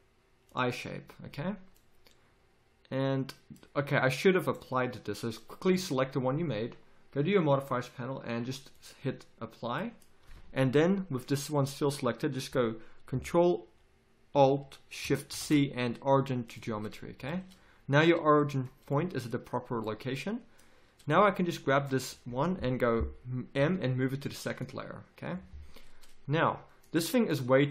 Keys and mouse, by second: 4.4-9.0 drag, 5.7 z, 9.8 middle click, 9.9-15.3 drag, 15.3 ctrl+alt+shift+c, 17.2 z, 23.6 m.